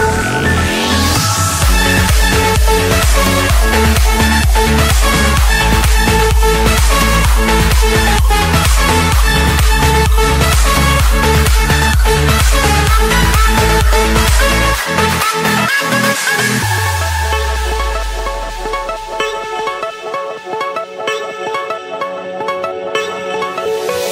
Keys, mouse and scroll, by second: 1.4 click, 2.5 Return, 3.8 Escape, 4.3-5.4 right drag, 5.8-6.8 drag, 8.4-9.5 drag, 10.1-11.3 drag, 14.9 click, 15.2-15.7 scroll down 4, 15.7 scroll up 5, 16.6 click, 17.1-17.4 scroll up 1, 17.4 Escape, 18.1 click, 18.9 click, 20.4-22.1 typing, 23.2 click.